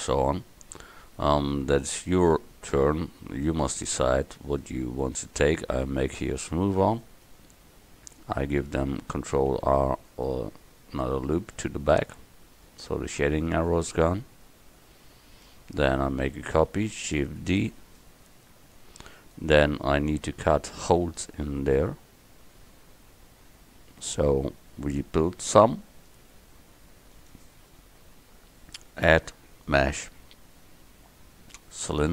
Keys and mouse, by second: 7.0 middle click, 7.8 Tab, 9.5 ctrl+r, 12.3 Tab, 14.9 KP_1, 17.5 shift+d, 25.5-29.5 drag.